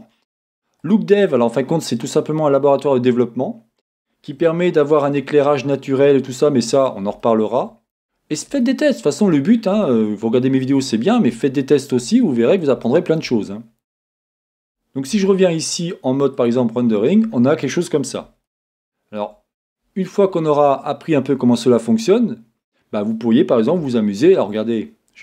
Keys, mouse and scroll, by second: 1.2 middle click, 2.3-7.9 middle drag, 5.3-5.7 scroll down 2, 7.9 scroll up 2, 8.0-9.4 middle drag, 8.6 scroll up 2, 9.4-9.9 scroll down 2, 9.9-17.2 shift+middle drag, 11.0-11.4 scroll down 2, 13.5-15.1 scroll up 2, 15.1-16.5 scroll up 1, 17.0 scroll down 2, 17.8 middle click, 18.6-25.2 shift+middle drag, 20.8-23.9 scroll up 2.